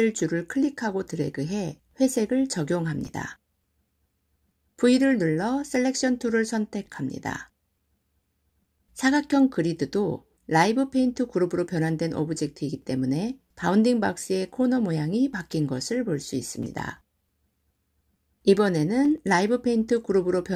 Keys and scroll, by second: 5.1 v.